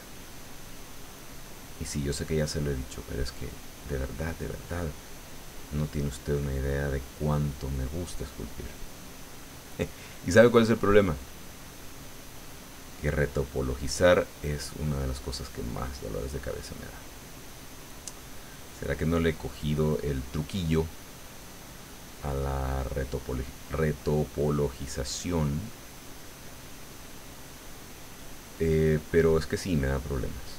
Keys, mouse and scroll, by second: 3.1 click, 3.8 middle click, 5.1-8.1 drag, 7.3 right click, 8.3-9.7 drag, 9.7 middle click, 10.7 middle click, 12.2 click, 13.3 click, 14.4-15.8 drag, 16.0-18.2 middle drag, 18.5-20.1 drag, 20.1 middle click, 21.1-22.3 middle drag, 22.4-23.8 drag, 25.4 click, 25.8 click, 26.8 click, 27.4 click, 28.2 click, 28.9-30.5 drag.